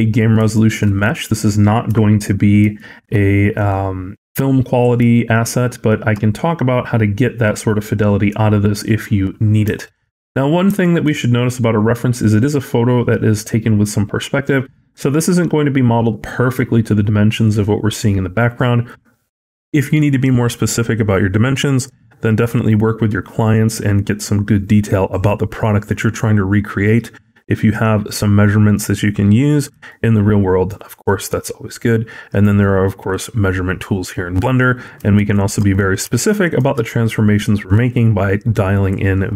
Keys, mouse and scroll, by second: 0.4 shift+middle click, 0.8 middle click, 1.7 KP_1, 2.6 shift+middle click, 3.7 scroll down 4, 4.5-4.9 scroll up 3, 5.1 shift+middle click, 9.8 shift+middle click, 10.1-10.5 scroll down 4, 10.7 shift+middle click, 11.0 scroll up 2, 11.5 scroll down 1, 12.3-13.9 scroll down 1, 29.7 shift+middle click, 35.0 shift+middle click, 35.5 scroll up 2, 36.0 shift+middle click.